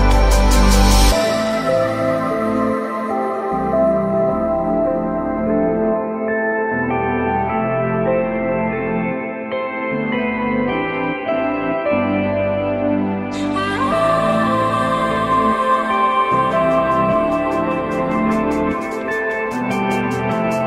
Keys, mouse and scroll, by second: 2.9 alt+middle click, 3.6 alt+middle click, 5.6 alt+middle click, 6.3 alt+middle click, 11.7 shift+click, 13.7 ctrl+click, 14.6 F3, 18.0 ctrl+click, 19.0 ctrl+click.